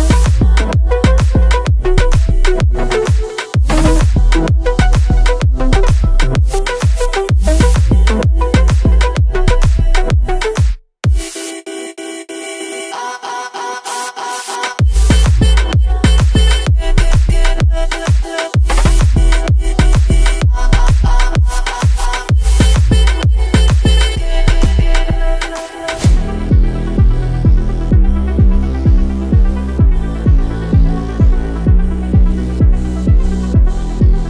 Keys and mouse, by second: 1.6 click, 10.4 Tab, 11.6 ctrl+r, 16.0-17.7 drag, 17.7 KP_1, 19.3 ctrl+b, 30.7 middle click, 33.3 3.